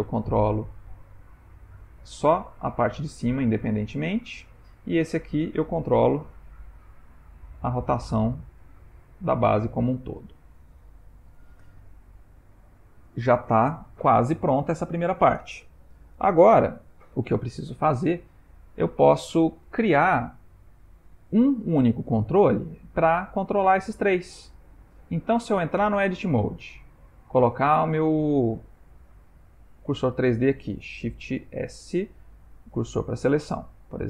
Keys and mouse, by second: 0.9 g, 4.9 click, 6.2 g, 12.2 ctrl+middle click, 13.0 shift+middle click, 18.4 ctrl+middle click, 25.9 Tab, 31.5 shift+s.